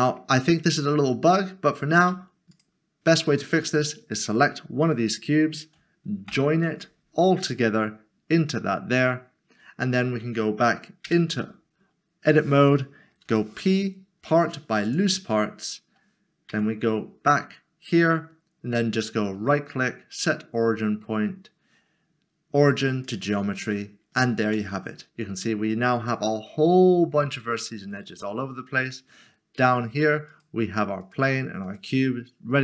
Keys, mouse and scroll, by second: 2.0 middle click, 2.5 shift+click, 6.3 ctrl+j, 11.0 Tab, 13.3 p, 14.9 click, 16.5 Tab, 19.3 right click, 23.0 click, 24.4 Tab, 28.9 Tab, 29.1 middle click, 30.3 click.